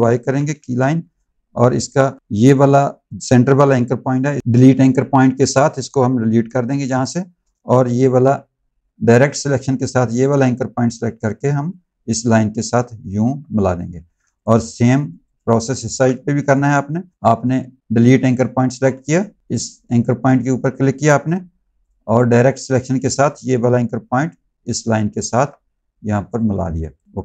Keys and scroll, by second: 0.4 z, 8.7 a, 13.8 z, 15.8 z, 21.2 a, 26.4 z.